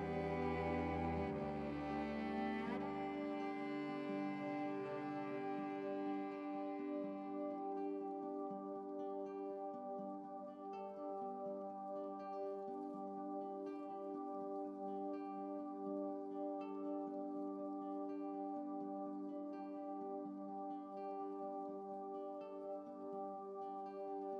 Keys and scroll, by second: 2.6 7, 19.6 ctrl+u.